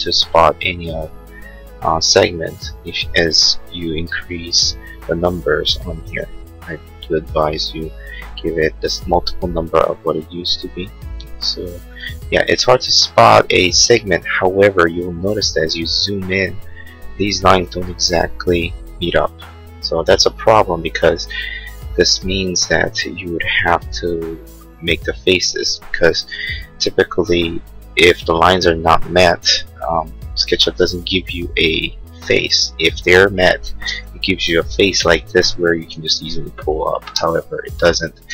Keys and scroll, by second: 5.4 9, 5.8 6, 6.0 Return, 29.6 l, 33.9 space, 35.9 p, 37.1 space, 37.8 ctrl+z.